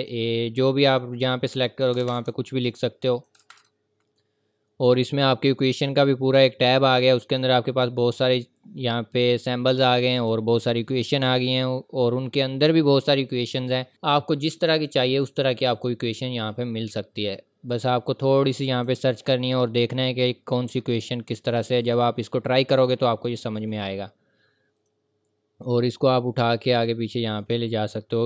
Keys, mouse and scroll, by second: 1.9 typing, 3.1 click, 3.4 typing, 5.4-6.1 typing, 7.7 click, 10.1 click, 14.3 click, 21.8 click.